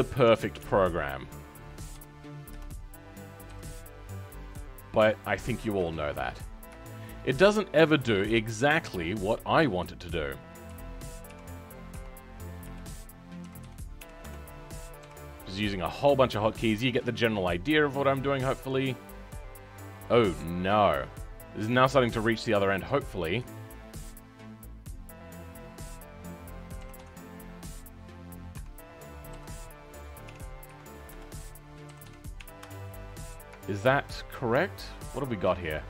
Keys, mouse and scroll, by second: 26.8 s.